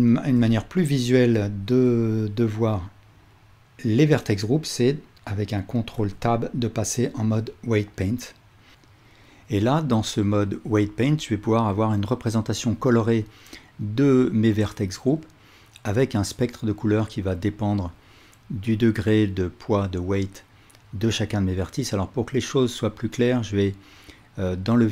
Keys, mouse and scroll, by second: 1.3 ctrl+alt+click, 2.6-8.8 drag, 6.0 ctrl+Tab, 9.0 ctrl+alt+click, 9.8-14.8 drag, 15.0 click, 15.5 click, 16.0 click, 16.4 click, 17.0 click, 17.8 click, 21.3 click, 21.8 click, 22.2 click, 24.1 click, 24.6 click.